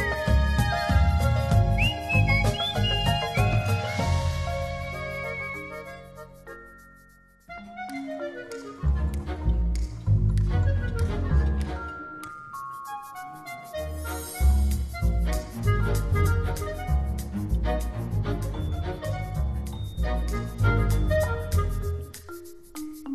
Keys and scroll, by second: 1.3 t, 10.6 0, 10.9 Return.